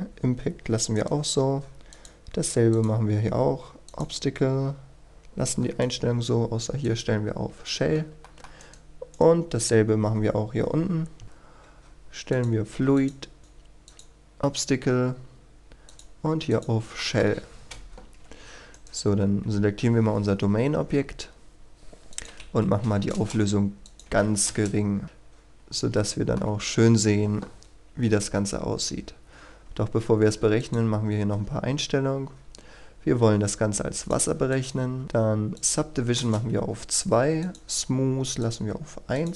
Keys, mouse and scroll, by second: 0.9 right click, 1.9 click, 8.2 middle click, 8.6 right click, 11.2 middle click, 12.3 click, 17.0 shift+middle click, 18.8 right click, 19.1 KP_1, 22.1 click, 22.7 KP_3, 23.1 Return, 23.9 click, 24.1 KP_3, 24.5 Return, 25.0-25.6 scroll down 1, 25.9 shift+middle click, 27.5-28.0 scroll down 1, 28.0-30.6 scroll up 1, 30.6 click, 30.9-32.6 scroll down 1, 33.9 click, 35.0-35.5 scroll down 1, 35.5 click, 35.9 KP_2, 36.1 Return, 37.4 click.